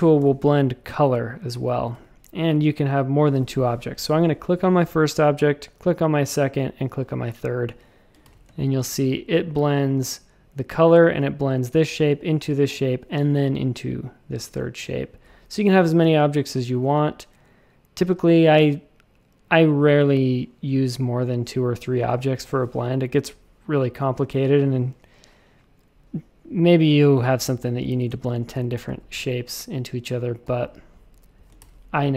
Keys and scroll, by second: 0.2 i, 1.5 shift+super+a, 1.9 w, 8.2 shift+super+a, 8.4 space, 27.9 shift+super+a, 28.0 space, 28.5 v, 30.4 v, 31.6 shift+super+a.